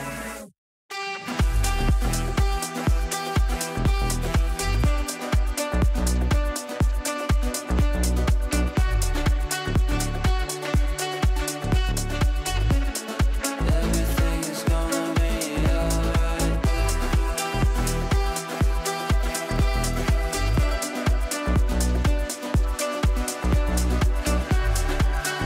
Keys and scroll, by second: 7.6 shift+F2, 7.9 Escape, 8.2 w, 9.0 shift+F2, 20.8 ctrl+z, 21.6 ctrl+z.